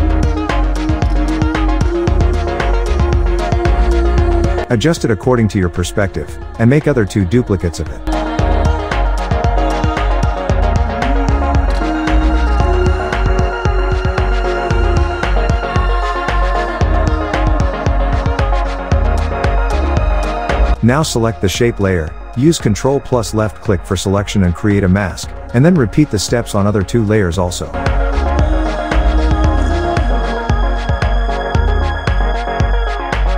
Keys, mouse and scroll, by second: 7.1 ctrl+Num_Lock, 7.1-9.7 drag, 9.7-16.2 drag, 22.2 ctrl+click, 23.8 click, 32.0 click.